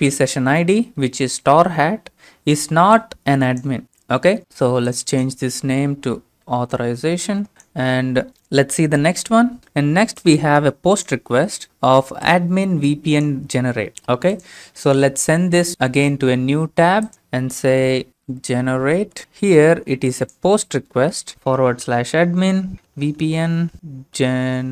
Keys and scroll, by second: 6.0-7.3 typing, 18.1-19.6 typing.